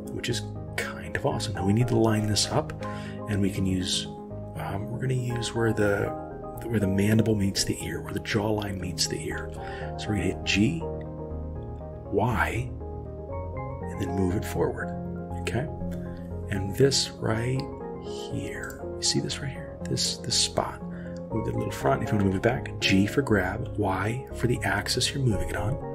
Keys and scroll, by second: 9.4 g, 22.2 g.